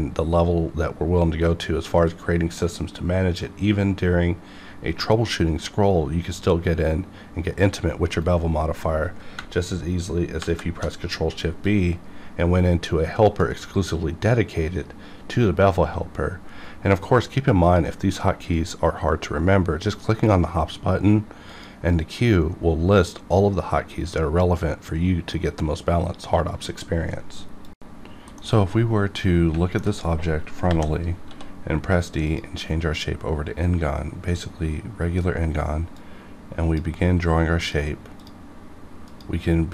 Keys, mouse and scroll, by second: 8.1 right click, 10.4 shift+b, 11.6-15.7 drag, 17.6 click, 21.5 click, 30.6 KP_5, 31.2 d, 32.2 click, 35.9-37.6 drag.